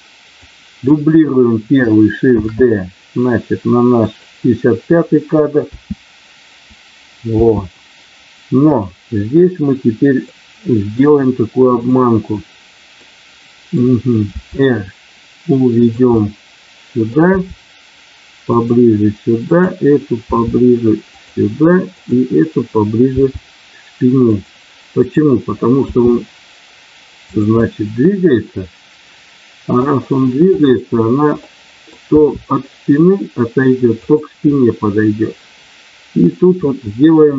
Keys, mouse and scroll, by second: 0.3 click, 2.3 shift+d, 4.0 click, 5.7 space, 8.7 click, 10.3 middle click, 11.7 click, 13.0 middle click, 14.3 r, 15.8 click, 17.0 middle click, 17.4 r, 18.4 click, 19.4 click, 20.3 r, 21.1 click, 24.9 click, 25.9 r, 27.3 click, 28.6-29.8 middle drag, 30.5 click, 31.4 middle click, 32.0 r, 34.0 click, 36.6 middle click.